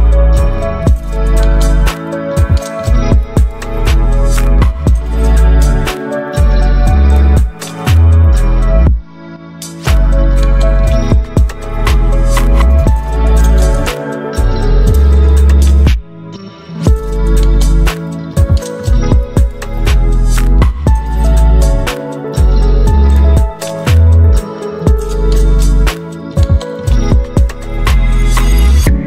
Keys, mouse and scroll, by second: 0.0-8.8 typing, 12.1 click, 13.2 v, 13.5 ctrl+t, 15.6-22.7 alt+drag, 22.7-24.4 drag, 25.4-27.6 alt+drag.